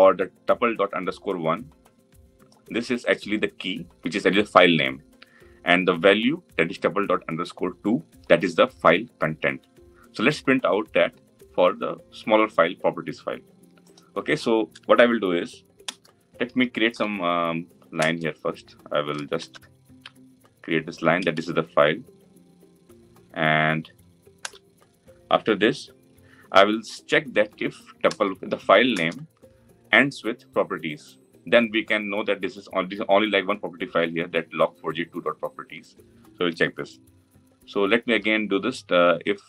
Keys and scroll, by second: 28.7 Return, 29.3 Return.